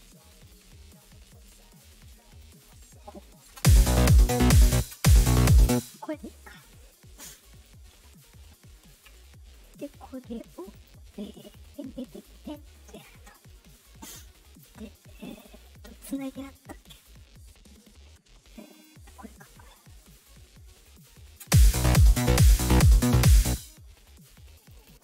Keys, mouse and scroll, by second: 0.3 right click, 1.3 click, 2.3 click, 3.4 space, 4.6 space, 4.8 space, 5.6 space, 6.7 click, 7.5 click, 10.7 click, 11.4-12.5 drag, 15.2 click, 15.7 click, 18.6 click, 19.9 click, 20.8 click, 21.3 space, 23.4 space, 24.5 click, 24.7 click.